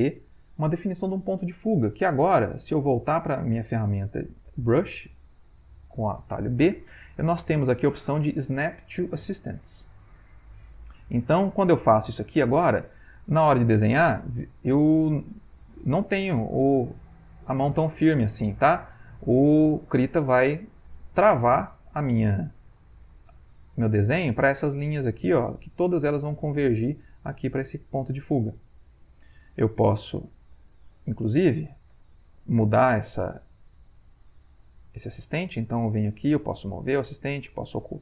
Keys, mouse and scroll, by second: 4.4 b, 11.9 click, 15.9-17.2 drag, 17.6-18.7 drag, 19.4-21.5 drag, 23.2-25.6 drag, 26.6-28.6 drag, 29.6 ctrl+z, 31.9 Delete, 36.6-38.0 drag.